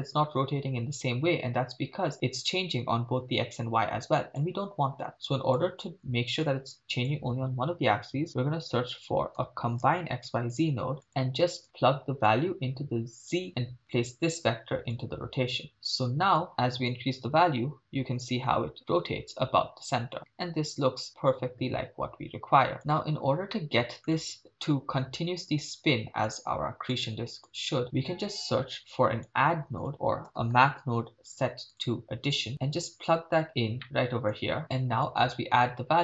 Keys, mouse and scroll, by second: 5.1 click, 6.7 shift+a, 12.3-13.3 drag, 13.9-15.1 drag, 15.7 click, 16.4 click, 16.9-22.8 drag, 23.5 middle click, 26.3-26.9 drag, 27.5-28.6 drag, 28.7-29.3 drag, 29.6 shift+a, 32.5 click, 33.8 middle click, 35.1-36.0 drag.